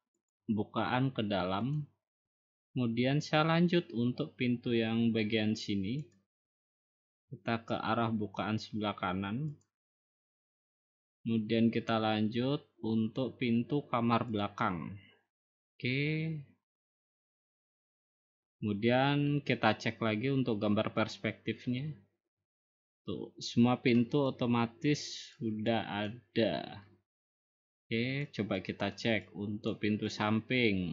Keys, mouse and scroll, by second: 0.3 click, 1.8 click, 2.7 scroll down 2, 3.3-3.9 scroll up 1, 6.1 click, 9.6 click, 10.4 scroll down 2, 10.9-11.5 scroll up 3, 14.5-15.6 drag, 17.0-18.1 drag, 21.1 click, 23.9 click, 24.6 click, 25.4 click, 26.1 click, 26.9 click, 27.1-28.1 scroll, 28.1 scroll, 28.2 click, 29.0 click, 29.7 click.